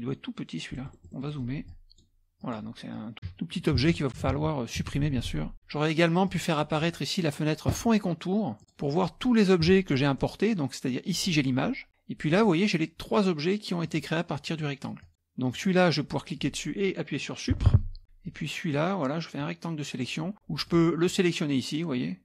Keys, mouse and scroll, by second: 0.8 middle click, 0.8-1.7 scroll up 1, 1.2 middle click, 1.7 click, 2.5 click, 2.9 click, 3.8 ctrl+z, 4.4 ctrl+z, 4.8 KP_Subtract, 4.9 KP_Subtract, 5.3 KP_Subtract, 6.3 click, 6.7 click, 7.2-7.7 scroll up 1, 8.6 click, 9.7 KP_Subtract, 10.2 scroll up 1, 10.3-11.0 scroll down 1, 11.1 click, 12.3 click, 13.2 click, 13.9 click, 14.5 click, 15.0 click, 15.5 click, 17.7 Delete, 18.3 click, 19.4 click, 20.7 click.